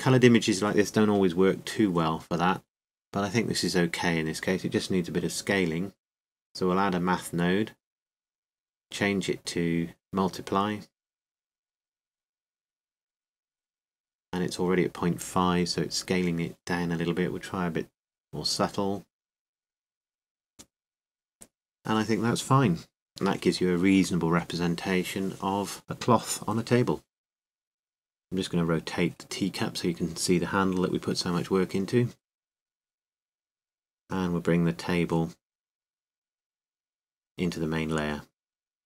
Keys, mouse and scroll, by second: 0.0-3.7 drag, 9.2-11.3 drag, 15.7 click, 15.9 click, 19.3 click, 20.0 click, 20.4 click, 20.6 click, 22.2-23.5 drag, 27.1-28.2 drag, 28.2-29.5 right drag, 28.9 r, 29.5-31.9 middle drag, 31.9-36.1 drag, 36.3-38.8 drag.